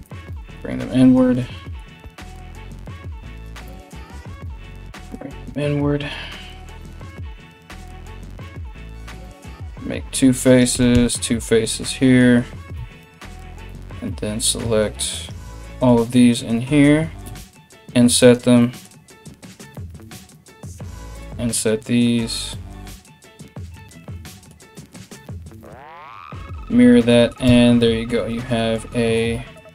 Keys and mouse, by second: 2.5-13.3 middle drag, 2.5 right click, 3.1 shift+right click, 3.8 g, 7.4 right click, 8.4 f, 8.5 f, 10.1 right click, 10.3 f, 10.6 f, 12.4 3, 13.3 right click, 13.4-14.7 middle drag, 14.7 ctrl+right click, 14.9-19.3 ctrl+middle drag, 18.8 i, 19.3 alt+right click, 19.5-29.7 alt+shift+middle drag, 19.9 alt+shift+right click, 21.8 i, 24.7 alt+x, 27.1 Tab.